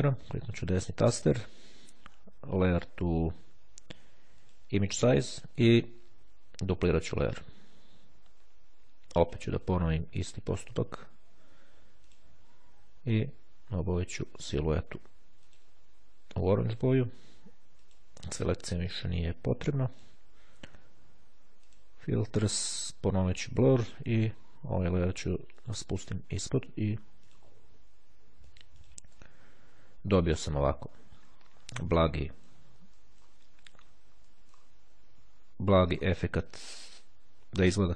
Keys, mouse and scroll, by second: 4.5 click, 7.3 click, 9.6 click, 10.8 click, 12.2 click, 13.4 click, 15.6 click, 16.7 click, 17.9 click, 20.1 click, 21.7 click, 22.5 click, 24.7 click, 27.3 click, 28.3 shift+click, 30.5-31.5 ctrl+scroll up 2, 32.3-33.7 middle drag, 34.3 middle click, 35.8 middle click.